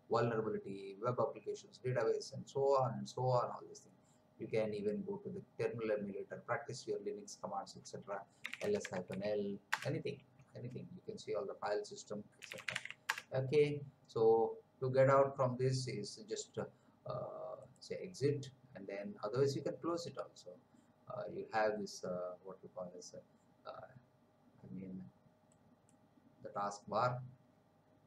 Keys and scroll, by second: 8.1-9.5 typing, 9.7 Return, 12.1-13.2 typing.